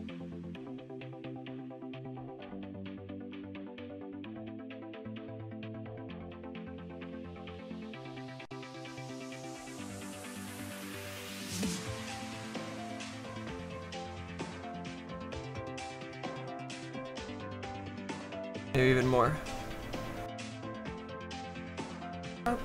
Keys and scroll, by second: 1.6 s, 3.6 z.